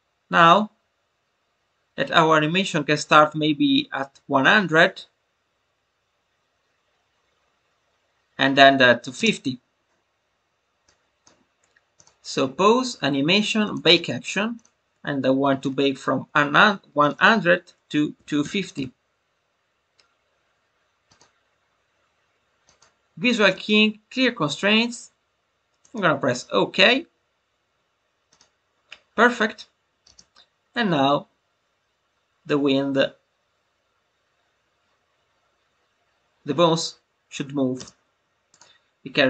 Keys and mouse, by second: 10.8 click, 12.0-26.7 drag, 28.2 click, 30.5 space, 37.7 space, 38.5-39.2 drag.